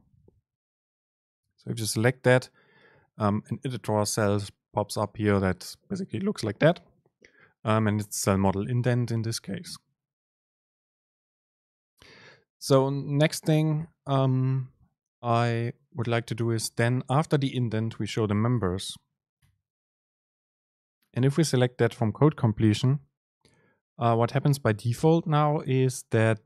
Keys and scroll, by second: 9.6 Right, 13.6 Right, 15.2 Left, 16.1 Right, 16.1 Return, 16.7 Return, 16.7 super+space.